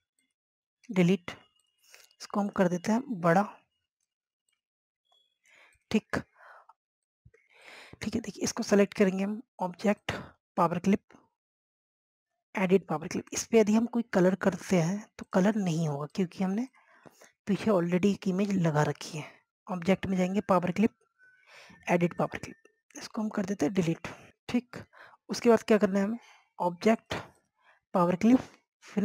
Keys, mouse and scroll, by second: 0.3 Delete, 1.4 click, 1.9 Delete, 2.8 click, 5.7 click, 6.9 click, 7.4 scroll down 1, 7.5 click, 12.6 scroll down 1, 13.0 scroll up 1, 14.3 click, 22.9 Delete, 25.9 click.